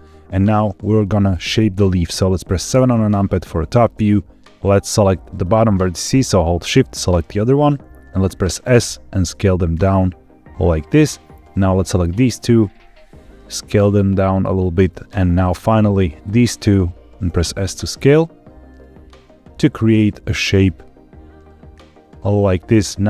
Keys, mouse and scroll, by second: 2.6 KP_7, 5.2 click, 6.9 shift+click, 8.6 s, 10.7 click, 11.4 click, 12.5 s, 14.3 click, 14.8-16.1 drag, 17.2 s, 22.3 click.